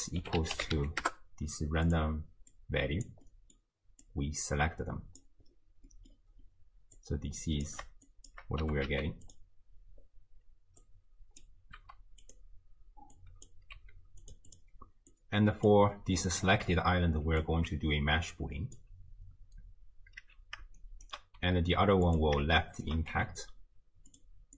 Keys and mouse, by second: 2.5-3.1 drag, 3.3-3.6 middle drag, 4.0-5.2 drag, 5.9 middle drag, 7.1-7.7 drag, 8.2 shift+click, 8.6 g, 10.8-11.5 drag, 11.8 g, 13.2 drag, 13.8 g, 14.5 click, 15.1-15.7 drag, 16.0 middle drag, 16.1 click, 17.4-18.9 alt+drag, 21.0 shift+right click, 21.4 g, 22.7 shift+click, 23.1 g.